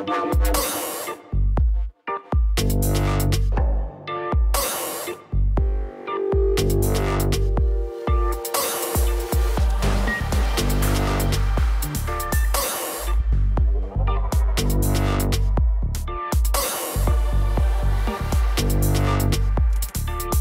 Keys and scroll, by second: 7.8 Return, 9.0 ctrl+j, 9.9 shift+Down, 15.2 Up, 16.2 ctrl+j, 16.9 shift+Down.